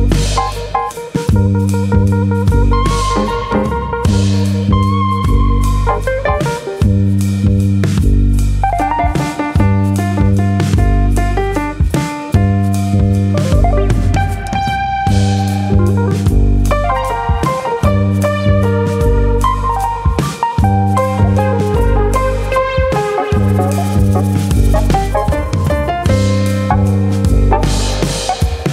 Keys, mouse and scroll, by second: 0.2 g, 0.9 click, 1.0 g, 1.7 click, 2.0 click, 2.3 g, 3.0 click, 3.2 middle click, 4.5-5.4 scroll down 5, 4.8 middle click, 5.0 Tab, 5.5 middle click, 6.9 scroll down 1, 7.1 middle click, 7.8 KP_1, 8.4-9.4 scroll up 2, 9.6 scroll up 1, 9.7 click, 10.0 Tab, 12.6 alt+click, 13.5-14.1 ctrl+KP_Add, 15.0 ctrl+KP_Add, 16.4 click, 17.6 shift+click, 19.4-20.0 scroll up 4, 19.8 middle click, 21.1 ctrl+KP_Add, 22.1 ctrl+KP_Add, 22.6 ctrl+KP_Subtract, 24.4 ctrl+KP_Subtract, 25.1 middle click, 25.9 KP_1, 27.5 ctrl+KP_Add, 28.0 shift+middle click.